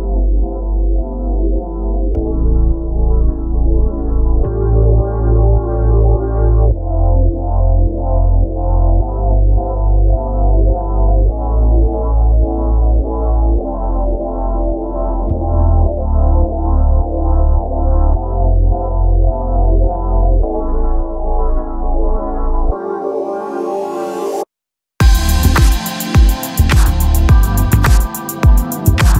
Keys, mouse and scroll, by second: 0.7-5.5 middle drag, 9.2-13.6 drag, 9.5 Tab, 11.5 ctrl+r, 14.0 middle click, 14.6-16.4 drag, 16.4 ctrl+r, 17.8 ctrl+r, 19.0 ctrl+r, 20.5 ctrl+r, 21.2-22.6 right drag, 21.7 ctrl+b, 22.9 e, 24.4 Tab, 28.8 Tab.